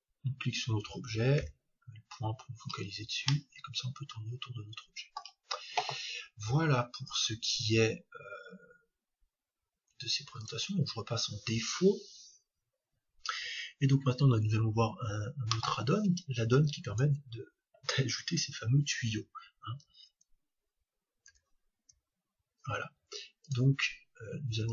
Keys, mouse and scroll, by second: 4.8 middle click, 8.5-10.5 drag, 14.6-16.5 scroll down 1, 16.5-17.4 scroll down 1, 21.8 t, 23.4-24.7 drag.